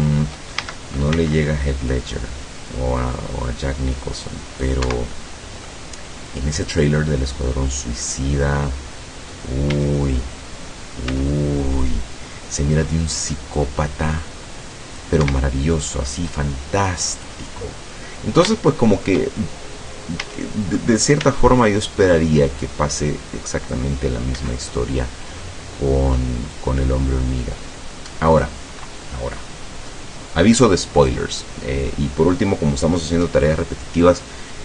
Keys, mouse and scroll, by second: 0.7 shift+a, 1.2 shift+c, 2.0-4.9 drag, 4.9 Escape, 5.2 middle click, 6.6-8.3 drag, 8.8 middle click, 9.8 a, 11.1 c, 11.9-15.2 drag, 15.3 Escape, 16.3-17.5 drag, 17.6-18.1 scroll down 1, 18.1-19.3 middle drag, 19.5 shift+scroll up 2, 20.3 a, 21.3 c, 21.8-24.0 drag, 24.1 middle click, 24.4 Escape, 25.1 middle click, 26.6-28.7 drag, 29.1-30.1 middle drag, 30.3-30.8 scroll up 1.